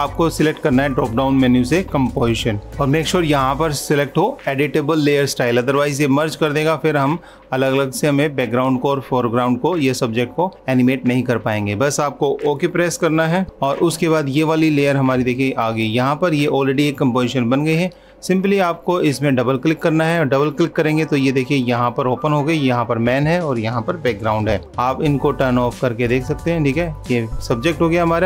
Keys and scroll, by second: 13.4 super+-, 24.6 super+-.